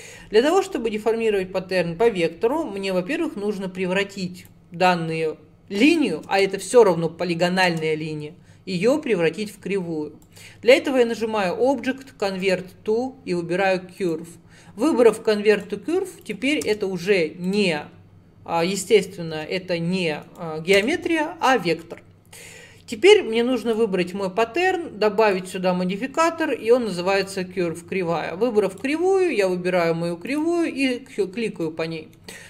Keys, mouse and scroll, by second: 4.5 click, 6.3 Tab, 7.7 Tab, 10.3-13.4 drag, 15.6 click, 16.3 click, 16.7 Tab, 17.5 click, 19.4 g, 20.8 Tab, 23.7 click, 25.3-28.4 drag, 28.8 click, 31.2 scroll down 1, 31.7 middle click, 32.3-32.4 scroll down 2.